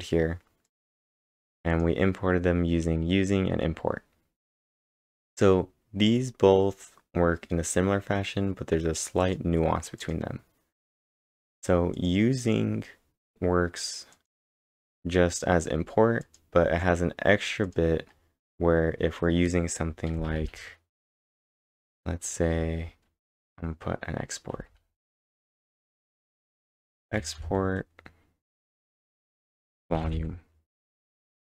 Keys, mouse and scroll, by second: 0.7 click, 1.3 click, 1.7 click, 9.0-9.7 typing, 9.2 click, 10.3-14.5 click, 17.7 click, 18.1 scroll up 3, 20.1-24.9 typing, 22.0-22.5 scroll up 2, 24.1 scroll up 2, 26.1-27.7 typing, 29.3 typing.